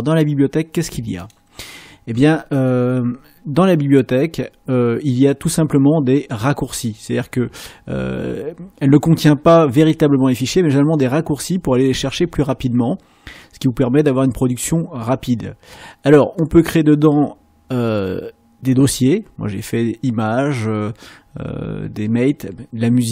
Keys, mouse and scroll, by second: 1.2 click, 16.4 click.